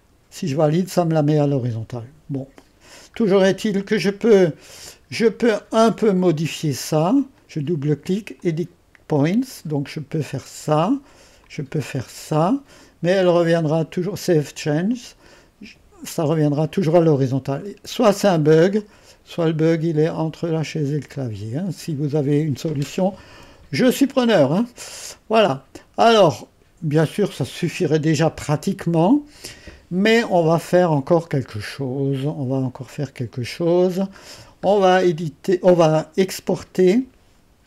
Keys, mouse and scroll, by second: 0.0-1.8 drag, 3.4-6.3 scroll down 2, 6.3 click, 7.2-9.6 drag, 9.6-17.3 drag, 17.3-18.2 scroll down 1, 18.8-24.1 drag, 24.2-25.1 scroll down 1, 25.1 scroll down 1, 25.4-27.0 drag, 27.0-27.6 scroll down 2, 27.6-35.8 middle drag, 35.8-37.6 drag.